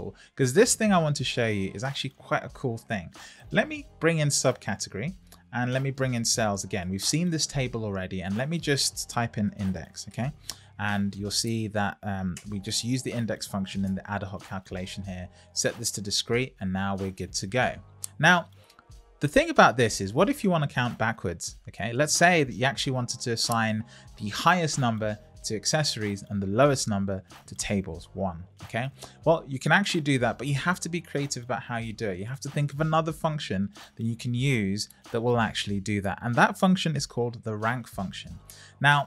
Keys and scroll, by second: 11.5 Down, 12.3 Return, 13.8 Return.